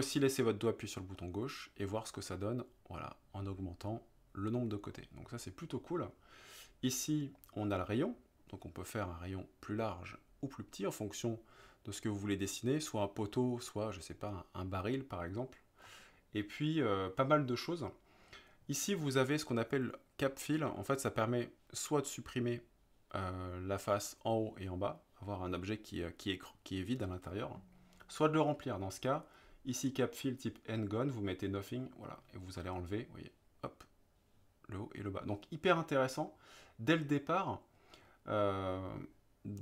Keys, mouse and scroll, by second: 1.2-6.0 drag, 7.4-15.8 drag, 31.0 click, 32.7-35.2 middle drag, 36.4-38.1 drag.